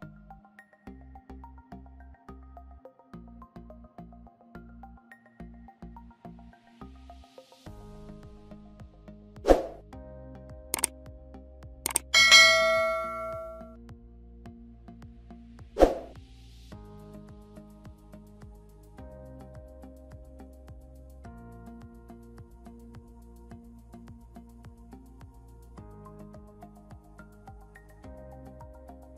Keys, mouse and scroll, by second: 3.2-4.1 typing, 4.2 Return, 5.3 double click, 6.1-6.4 typing, 6.7 Return, 14.4 typing, 16.1-16.7 typing, 18.6 scroll down 1, 24.1 Home, 27.7 scroll down 1.